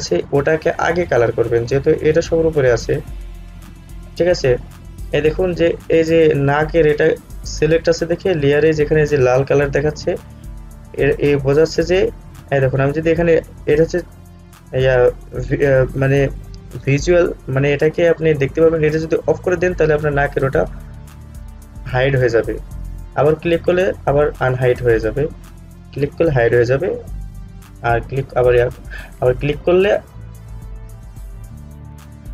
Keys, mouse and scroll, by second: 19.4 click, 25.8 click.